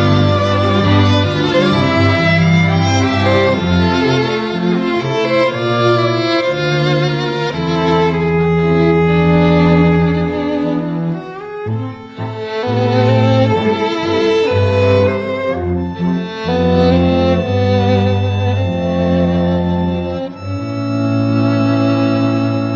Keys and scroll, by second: 15.7 d.